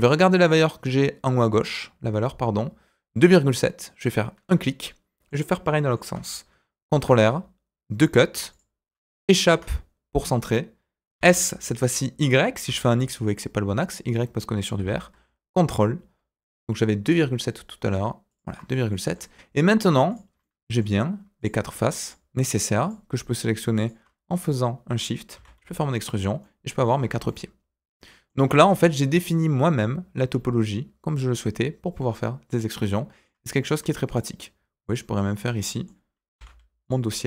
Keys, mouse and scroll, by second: 32.7 middle click, 33.6 click, 34.0 shift+click, 34.8 shift+click, 35.3 shift+click, 35.5 middle click, 36.3 e, 37.0 scroll down 2.